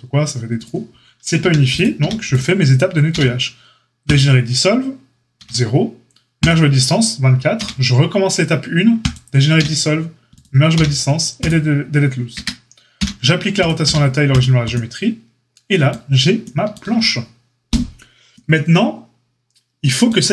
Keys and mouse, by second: 1.3 a, 1.9 a, 3.1 q, 5.3 q, 7.5 q, 9.5 q, 10.7 q, 12.3 Tab, 12.9 q, 13.8 q.